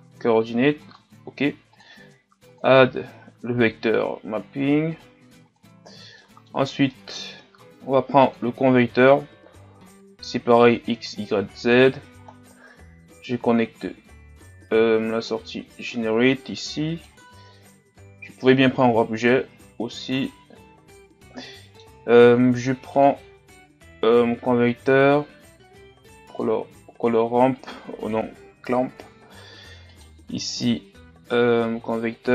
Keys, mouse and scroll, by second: 3.4-7.5 drag, 7.5-8.3 scroll up 2, 8.3-9.0 scroll up 1, 9.0-9.6 scroll up 1, 9.6-10.9 scroll up 1, 10.9-11.6 scroll up 1, 11.6-12.2 scroll up 1, 12.2-14.9 scroll up 1, 14.9-15.3 scroll up 3, 15.3-28.7 drag, 28.7 Delete.